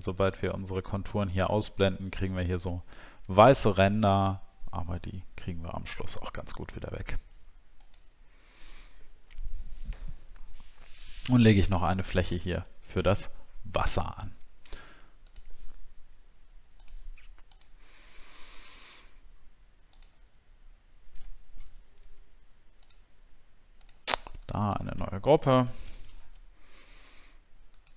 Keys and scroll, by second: 11.3 alt+scroll down 1, 21.5 ctrl+z, 25.4 shift+w.